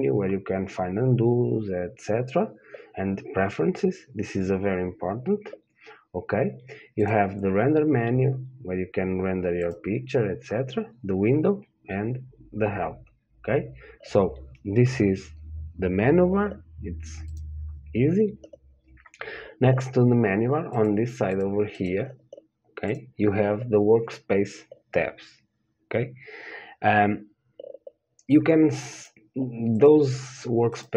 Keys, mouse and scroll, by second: 7.3-9.3 drag, 9.9-17.5 drag, 21.1-30.9 drag.